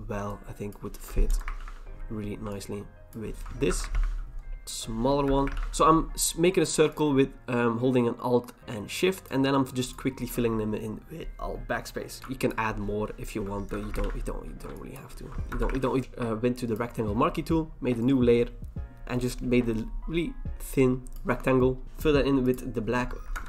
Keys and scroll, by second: 1.3 alt+BackSpace, 1.6 ctrl+d, 3.7 alt+BackSpace, 3.9 ctrl+d, 5.2 alt+BackSpace, 5.5 ctrl+d, 13.7 alt+BackSpace, 14.0 ctrl+d, 15.5 alt+BackSpace, 15.8 ctrl+d, 23.3 alt+BackSpace.